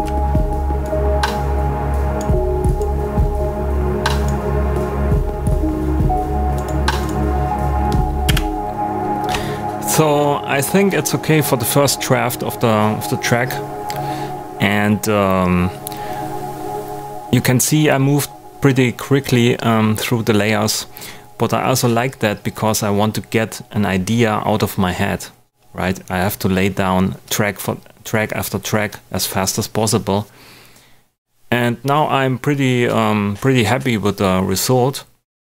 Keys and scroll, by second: 8.2 space.